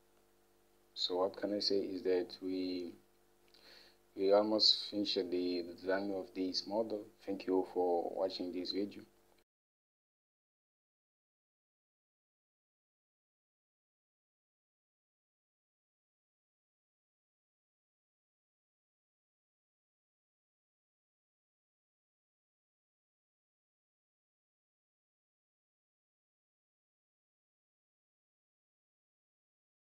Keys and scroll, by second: 1.4 Delete, 8.9 Home.